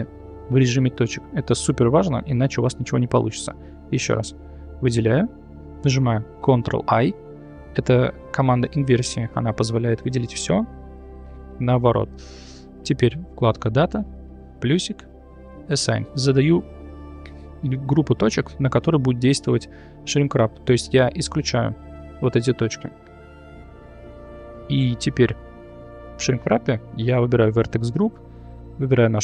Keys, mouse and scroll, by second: 2.4 click, 4.4 alt+click, 6.4 ctrl+i, 9.7 middle click, 14.7 click, 15.7 click, 16.3 middle click, 17.4 middle click, 23.9 click, 27.6-28.8 drag.